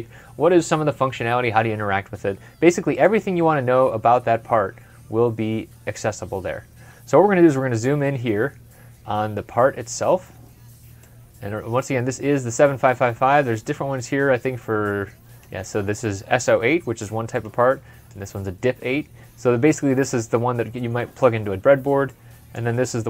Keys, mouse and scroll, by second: 1.8 middle click, 1.8-3.3 scroll up 1, 3.4 scroll down 1, 4.0 scroll down 1, 4.9 scroll down 1, 6.1 scroll down 1, 7.6 ctrl+scroll up 1, 22.5 ctrl+scroll, 22.7 scroll up 1.